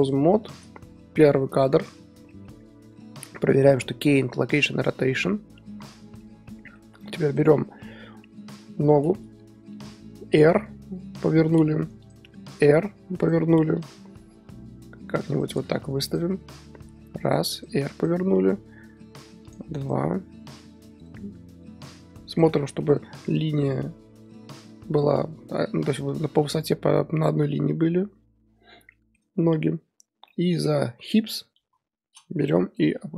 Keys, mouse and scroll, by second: 0.5-2.2 drag, 2.2 shift+middle drag, 2.5 scroll up 2, 5.9-7.3 shift+middle drag, 7.3-8.1 drag, 8.1 scroll up 2, 8.5 KP_3, 9.7 r, 12.1 click, 12.4 r, 13.8 click, 14.0 r, 16.1 click, 16.6 r, 18.1 drag, 18.3 r, 19.9 click, 20.2 r, 22.7 shift+middle drag, 22.9 scroll up 4, 28.4 scroll down 4, 28.9-31.1 shift+middle drag, 31.1-31.6 drag, 31.6 KP_3, 32.9 g.